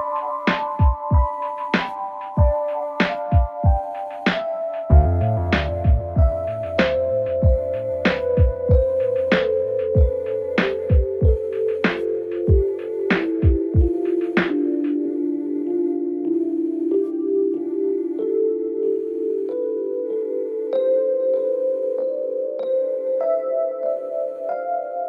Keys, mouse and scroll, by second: 0.0-0.3 typing, 1.7-3.2 click, 4.9 click, 6.8 click, 7.7 Return, 8.6 click, 9.6 Return, 11.4 click, 12.4-14.3 typing, 15.1-15.8 click, 19.3 click, 21.4 space, 24.2 space.